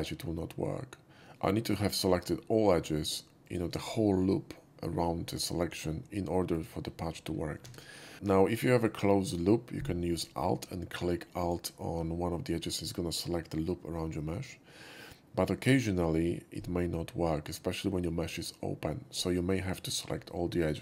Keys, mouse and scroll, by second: 3.4 shift+click, 6.5 click, 7.6 ctrl+z, 8.4 shift+middle click, 11.4 alt+click.